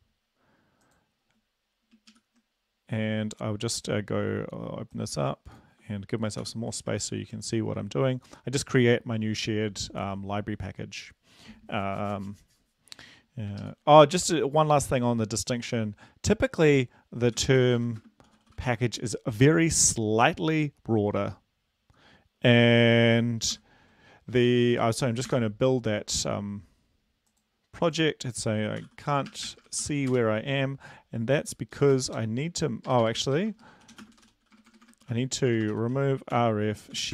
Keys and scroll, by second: 2.1 super+Up, 6.4 ctrl+l, 7.2 ctrl+v, 13.7 super+Left, 17.4-18.7 typing, 23.5 ctrl+l, 25.3 Return, 28.8-30.1 typing, 31.7-37.1 typing.